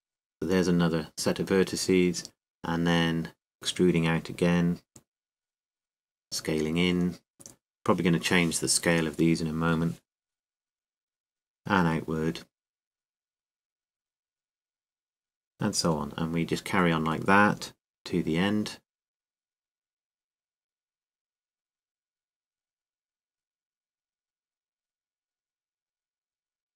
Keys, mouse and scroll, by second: 4.3 e, 7.1 click, 7.1 e, 7.4 s, 10.4-12.4 drag, 12.4 e, 15.2 click, 15.9 s, 17.9-19.3 drag, 19.0 e, 21.3 click, 21.3 e, 21.7 e, 24.3 ctrl+z, 24.3 e, 26.6 s.